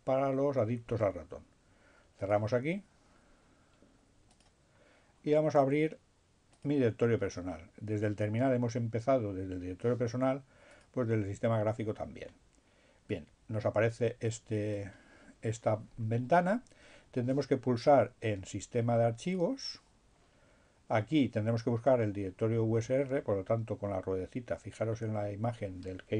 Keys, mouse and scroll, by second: 0.7-2.9 drag, 4.4 click, 6.7 click, 8.7-11.4 drag, 13.2-15.4 drag, 19.4 click, 24.0-25.0 scroll down 2.